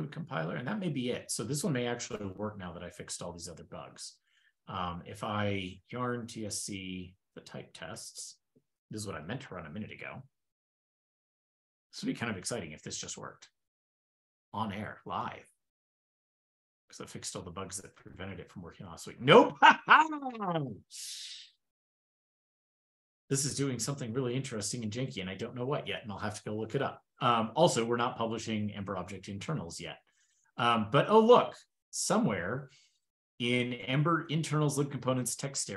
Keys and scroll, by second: 6.5 ctrl+e, 7.9 ctrl+l.